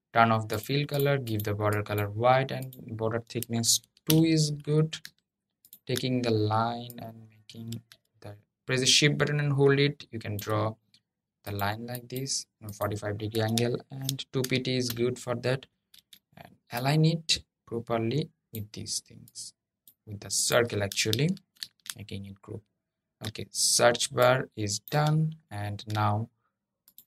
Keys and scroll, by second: 21.1 super+g.